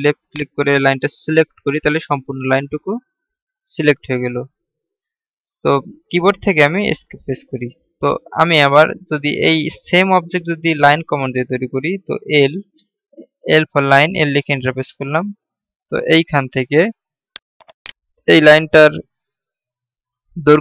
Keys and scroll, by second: 12.9 l.